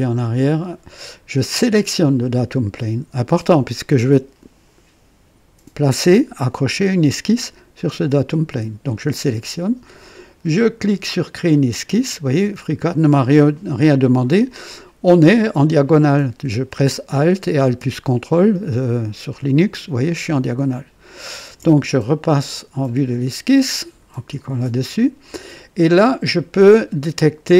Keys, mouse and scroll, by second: 0.4 click, 1.6 click, 11.4 click, 13.5-14.4 right drag, 19.3-21.7 drag, 23.8 click, 27.4 click.